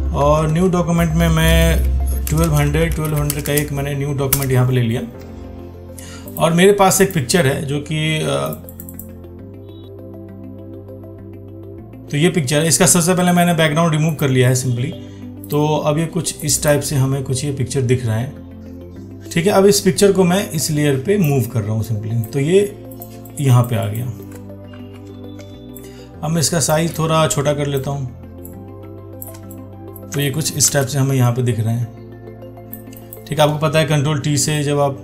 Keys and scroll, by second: 25.0 ctrl+t.